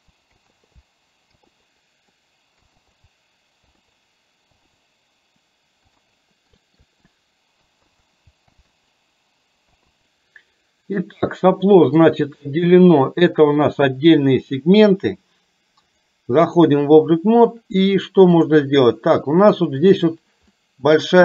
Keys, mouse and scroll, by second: 0.0-1.4 typing, 1.8 middle click, 2.6-4.7 typing, 5.9 l, 5.9 p, 6.3 middle click, 6.6 shift+middle click, 7.6-9.8 typing, 11.2 middle click, 16.2 click, 20.7 middle click.